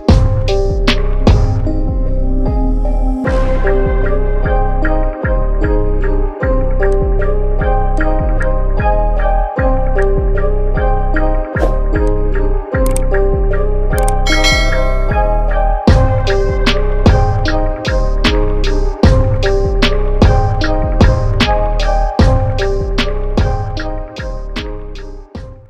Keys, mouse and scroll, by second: 1.0 ctrl+z, 3.3 ctrl+alt+z, 4.3 ctrl+shift+z, 6.0 ctrl+shift+z, 6.9 click, 11.2 ctrl+z, 12.0 click.